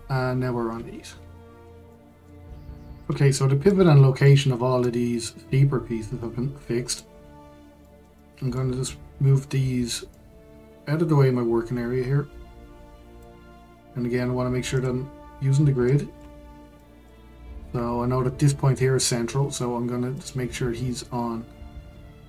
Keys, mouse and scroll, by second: 0.7-1.9 scroll down 7, 1.9-6.2 shift+middle drag, 6.2 click, 7.2-7.8 scroll down 5, 7.8-10.1 shift+middle drag, 10.1 click, 14.7 click, 15.8-16.3 shift+middle drag, 16.3-16.8 scroll up 1, 16.8-19.9 shift+middle drag, 20.1 click.